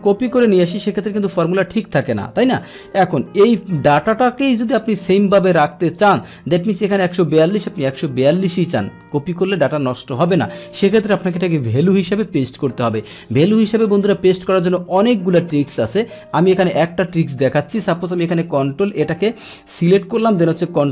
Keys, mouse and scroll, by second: 0.4 ctrl+c, 0.6 click, 1.2 ctrl+v, 4.8 ctrl+z, 5.9 click, 7.0 click, 8.1 click, 17.2-19.0 drag.